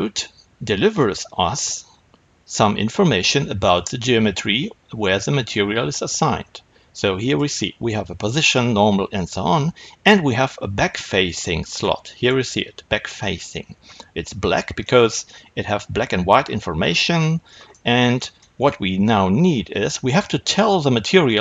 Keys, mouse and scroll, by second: 7.1 click.